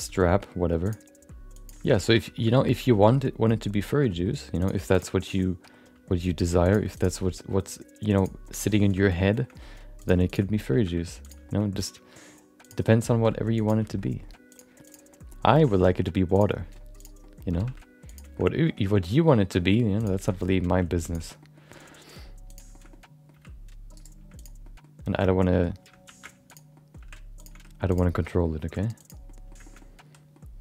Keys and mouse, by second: 0.1 shift+middle click, 0.3 middle click, 0.8 click, 1.1 g, 1.8 shift+middle click, 2.0 middle click, 2.3 shift+middle click, 3.0 shift+middle click, 3.2 middle click, 3.9 shift+middle click, 4.1 middle click, 4.6 click, 4.9 shift+click, 5.2 middle click, 5.3 middle click, 5.8 g, 6.9 click, 7.2 middle click, 7.6 g, 8.4 middle click, 9.0 middle click, 9.3 middle click, 9.5 middle click, 10.0 click, 10.3 click, 10.5 middle click, 10.7 g, 11.4 middle click, 11.6 middle click, 12.6 click, 12.8 middle click, 13.1 g, 13.8 shift+middle click, 14.0 middle click, 14.5 click, 15.1 middle click, 15.4 g, 16.5 middle click, 17.0 click, 17.2 middle click, 17.5 g, 18.3 middle click, 18.8 shift+middle click, 19.4 shift+middle click, 19.5 middle click, 20.0 click, 20.2 shift+middle click, 20.3 middle click, 20.7 g, 21.4 middle click, 21.7 middle click, 21.9 middle click, 22.5 click, 22.7 middle click, 22.9 middle click, 23.4 g, 24.3 click, 24.6 middle click, 26.0 shift+2, 26.5 click, 26.7 middle click, 27.4 g, 27.5 r, 28.1 middle click, 28.5 g, 29.2 middle click, 29.6 shift+middle click, 29.8 middle click.